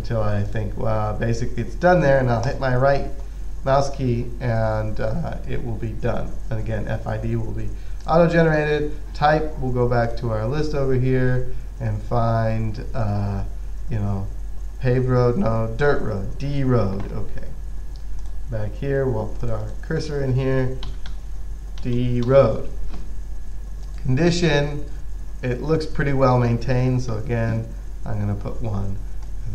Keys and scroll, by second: 20.9-23.0 typing, 27.4 1.